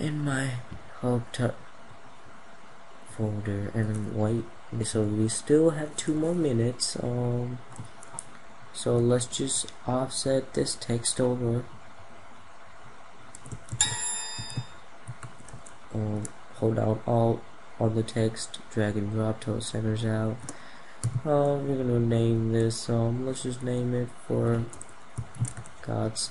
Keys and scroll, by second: 2.4 F2, 13.4 ctrl+z, 15.2 ctrl+alt+z, 25.0 ctrl+z.